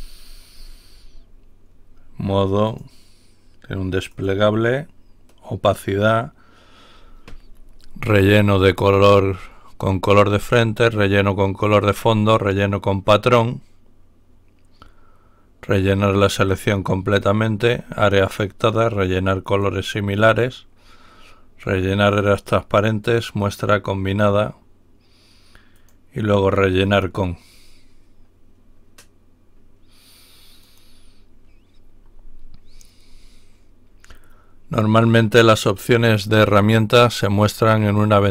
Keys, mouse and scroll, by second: 0.1-1.1 ctrl+scroll down 1, 2.6 click, 4.0 click, 19.5 click, 25.8 click, 26.7 click, 30.6 click, 32.3-33.3 scroll down 2, 33.3-33.6 scroll down 1.